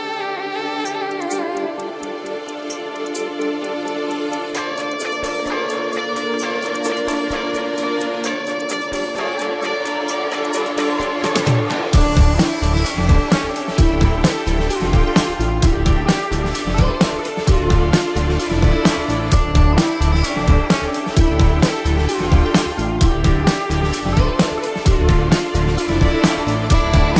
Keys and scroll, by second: 0.8 ctrl+=, 1.4 ctrl+=, 2.2 ctrl+alt+z, 2.3 ], 2.8 ctrl+-, 3.2 ctrl+-, 3.6 ctrl+-, 3.8 space, 4.2 space, 4.4 ], 5.3 ], 5.6 ctrl+-, 7.7 ], 10.0 ctrl+alt+z, 11.3 ctrl+=, 11.7 space, 15.5 ctrl+alt+z, 17.2 ], 17.9 ], 19.1 ctrl+-, 19.8 ctrl+alt+z, 21.4 ctrl+-, 21.6 space, 22.0 ], 25.5 ctrl+-, 25.8 ].